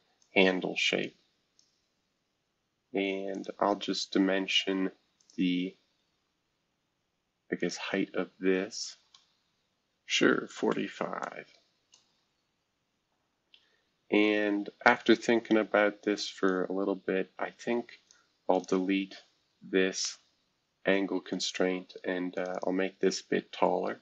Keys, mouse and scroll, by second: 0.2-1.6 drag, 2.0-3.3 scroll down 2, 3.3 click, 5.2 click, 5.7-6.6 scroll down 2, 7.6-9.1 shift+drag, 9.1 typing, 10.2-11.2 typing, 11.8 Return, 16.0 click, 16.4-18.1 drag, 18.5 click, 20.1 Delete, 22.3 click, 22.5 click.